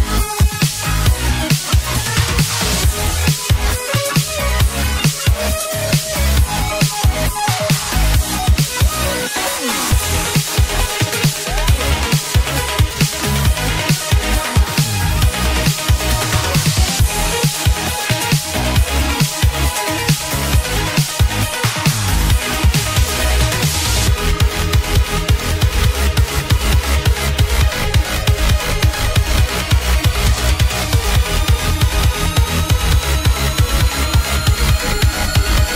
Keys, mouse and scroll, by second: 13.3-14.2 scroll up 11, 14.2-14.6 scroll up 6, 14.9-15.8 scroll down 4, 17.9-18.8 z, 26.0-27.4 z, 33.0-33.5 scroll up 1, 34.9 ctrl+s.